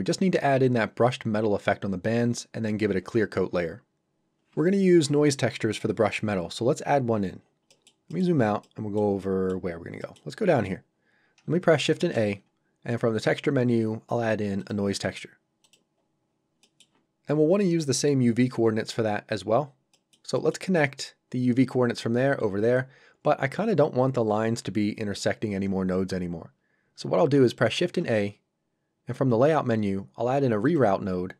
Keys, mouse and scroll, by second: 7.1 scroll down 1, 7.7 middle click, 9.7-10.0 scroll down 1, 10.0 middle click, 11.0-11.4 scroll up 1, 11.9 shift+a, 14.6 click, 16.0 scroll up 1, 16.6 middle click, 19.3 scroll down 1, 19.9 middle click, 26.6 scroll up 1, 27.8 shift+a, 30.6 click.